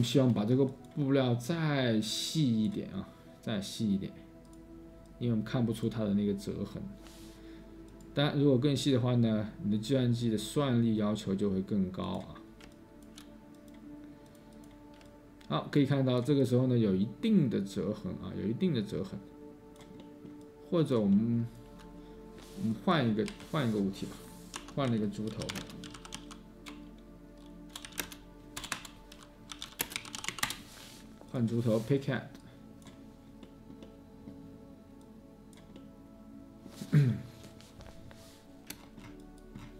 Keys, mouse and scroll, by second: 13.3 space, 15.0-16.6 space, 18.3-21.8 space, 23.2 Delete, 24.5 Tab, 24.8-30.9 typing.